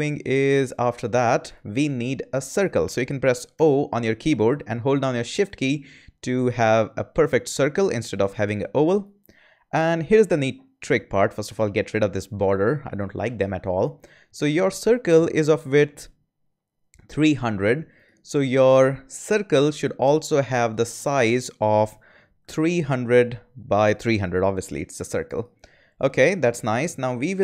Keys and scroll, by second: 3.5 o, 22.1-23.1 typing.